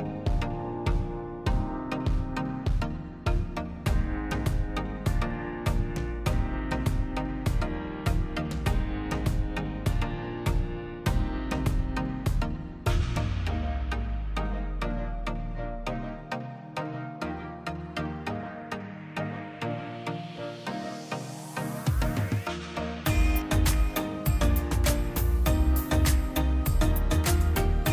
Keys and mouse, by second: 1.7-2.1 middle drag, 2.2-3.2 middle drag, 3.2-6.2 drag, 9.1-11.6 drag, 11.9-13.2 middle drag, 13.3-14.4 middle drag, 14.4 click, 14.7 shift+a, 18.1 click, 20.2-21.2 drag, 21.9 ctrl+shift+click, 22.7 drag, 23.0-23.4 drag, 23.5-27.2 middle drag, 27.2 click, 27.8 drag.